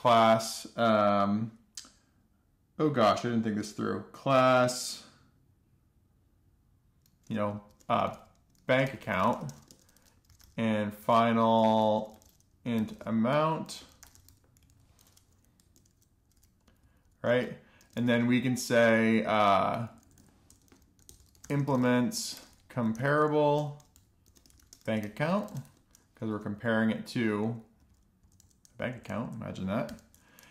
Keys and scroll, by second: 0.0-0.9 typing, 7.9-15.3 typing, 15.8 Down, 16.2 Return, 16.9 Down, 17.2 Up, 17.8 alt+shift+f, 18.3 Return, 18.5 alt+shift+f, 18.8 Up, 19.0 Up, 19.7-20.4 Right, 20.5 Right, 21.0-22.8 typing, 24.0 Return, 24.1-26.6 typing, 28.3 alt+Left, 28.6 alt+Left, 28.8 alt+Left, 29.4 Left, 29.5 Left, 30.3 super+..